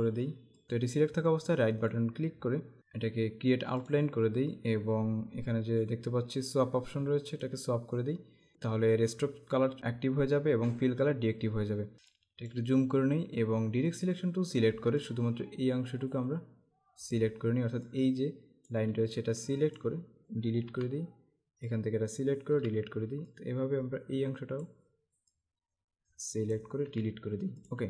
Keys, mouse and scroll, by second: 2.0 right click, 4.0 click, 7.4 click, 8.5 click, 11.9 space, 12.1 click, 12.4 space, 14.0 click, 15.1 click, 20.7 Delete, 21.7 click, 22.5 Delete, 23.3 click, 26.9 Delete, 27.6 click.